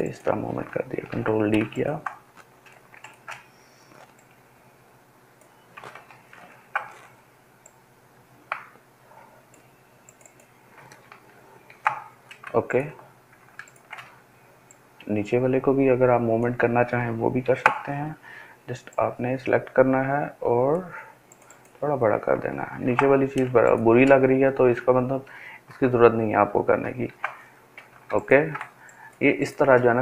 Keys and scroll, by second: 1.1 ctrl+d, 6.5 ctrl+t, 11.7 ctrl+d, 17.4 ctrl+t, 22.8 ctrl+d, 24.6 ctrl+z, 25.2 ctrl+alt+z, 27.0 ctrl+d.